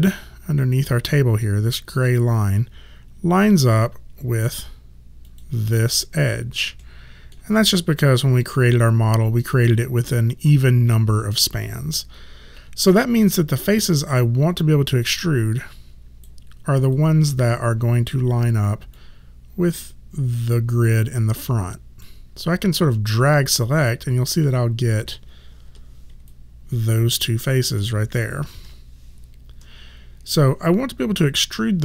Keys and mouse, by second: 3.8 right click, 5.3 click, 6.8 alt+middle click, 15.1 right click, 19.0 click, 25.8 f, 26.3 alt+right click, 28.7 5.